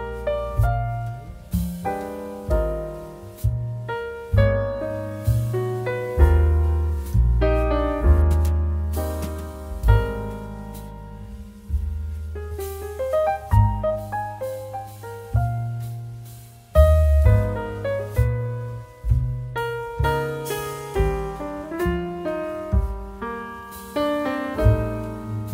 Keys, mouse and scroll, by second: 4.6-12.4 drag, 17.9 click, 21.8 click.